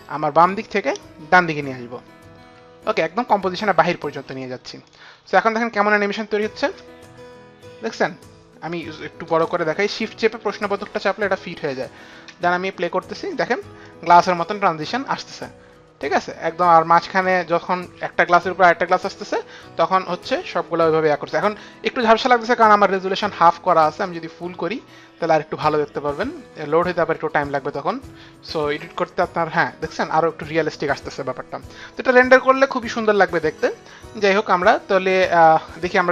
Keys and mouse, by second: 0.5 click, 4.8 click, 5.8 click, 6.6 space, 8.7 click, 12.3 space, 13.8 click, 22.9 click, 24.1 click, 35.4 click.